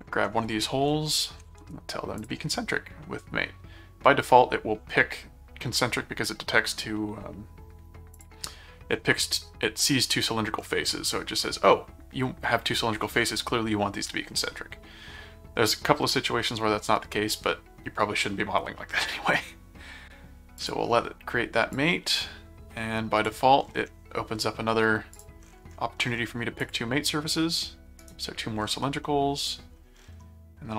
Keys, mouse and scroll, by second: 1.1 ctrl+click, 2.2 click, 8.1 click, 20.6 click, 21.7-23.2 drag, 25.1 click, 26.6 click, 28.0 right click, 29.0 middle click.